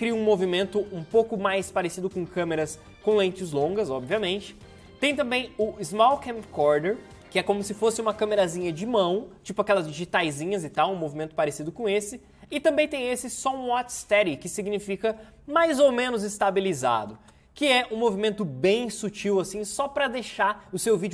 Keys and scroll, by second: 4.0 space, 4.5 ctrl+z, 7.3 space, 11.8 space, 12.3 ctrl+z, 17.1 space.